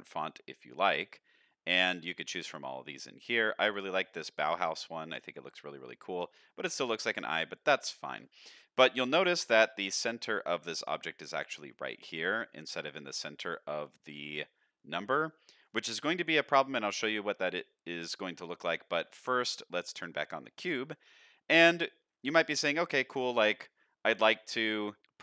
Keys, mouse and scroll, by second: 0.5 click, 0.5 scroll down 1, 6.9-7.3 shift+middle drag, 7.9 shift+middle click, 9.1-10.1 scroll up 2, 10.1-10.9 scroll up 1, 15.2-18.6 scroll down 3, 19.2 middle drag, 20.6 click, 21.2-22.2 scroll up 2, 21.6-22.2 middle drag, 22.4 shift+middle drag, 22.9 middle drag, 24.2 middle drag.